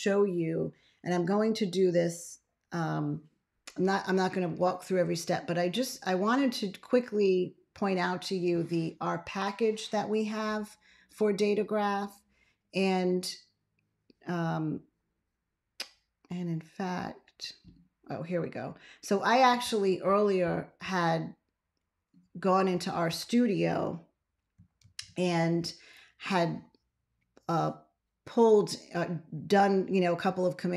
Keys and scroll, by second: 24.7 ctrl+x.